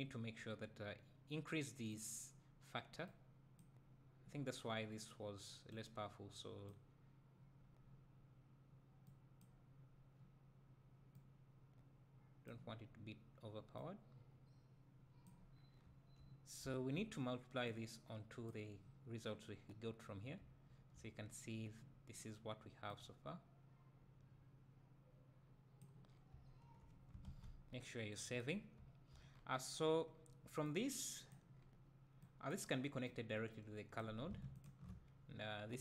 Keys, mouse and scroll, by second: 15.5 scroll down 2, 15.8 `, 26.1 scroll down 2, 26.3 `, 32.2-34.6 drag, 35.4 `.